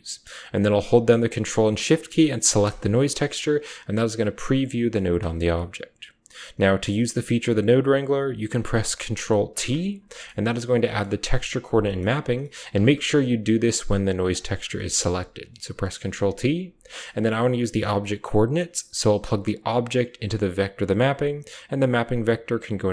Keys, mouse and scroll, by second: 2.4 ctrl+shift+click, 2.5 typing, 4.4 click, 4.7-5.7 typing, 4.7 click, 5.3 click, 6.9 click, 9.1-10.0 typing, 9.9 click, 10.9 click, 11.7 click, 12.3 click, 12.7 ctrl+z, 13.2 click, 14.3 ctrl+t, 14.7 click, 14.9 a, 18.0 click, 19.3-20.4 drag, 19.6 typing, 20.6 click, 21.5 click, 22.5 drag.